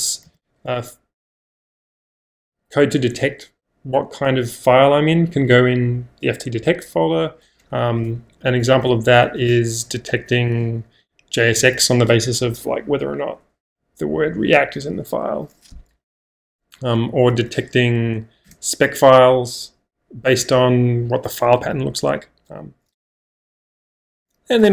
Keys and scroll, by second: 0.0-1.4 typing, 7.8-9.9 typing, 10.7 Return, 16.3-18.0 typing, 18.5 Return, 23.2 -, 24.1 -, 24.6 j.